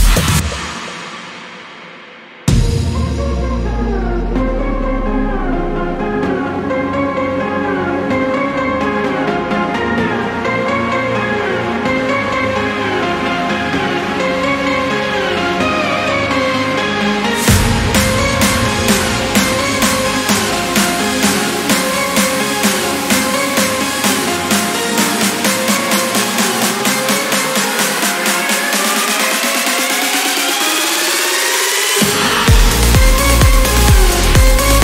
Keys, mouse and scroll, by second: 1.7 ctrl+click, 3.2 click, 4.1 click, 4.5 click, 7.2 click, 8.2 click, 8.5 middle click, 10.1 click, 11.5 click, 13.2 click, 14.4 click, 15.6 click, 16.6 4, 17.3 click, 19.0 click, 19.9 click, 21.7 click, 22.8 right click, 25.0 click, 25.6 click, 26.1 click, 27.2 click, 27.8 click, 28.6 click, 29.0 right click, 30.0 click, 31.4-32.8 drag, 33.4-34.8 drag.